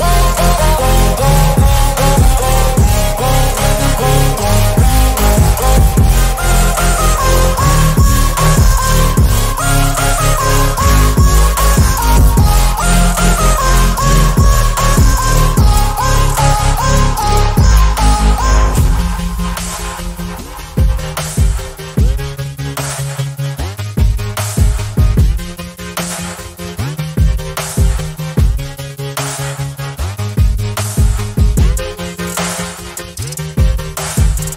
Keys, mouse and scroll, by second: 0.1-2.0 drag, 2.2 click, 3.0 click, 4.3 click, 4.9 scroll down 1, 5.1 scroll up 2, 5.2 click, 5.5 click, 8.6 click.